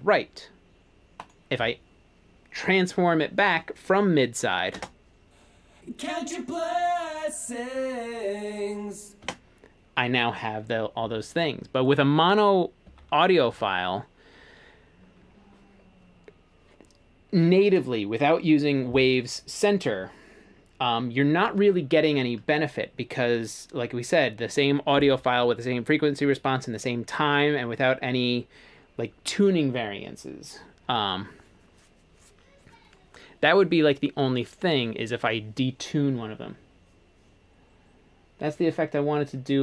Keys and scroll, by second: 4.8 space, 9.3 space, 13.6 shift+super+s.